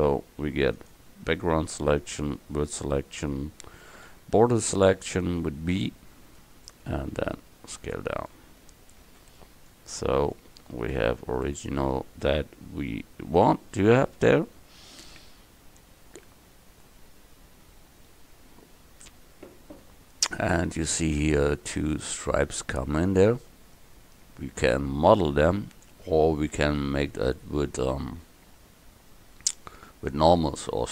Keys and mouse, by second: 0.8-2.3 drag, 4.1 b, 7.2 s, 9.1 Tab.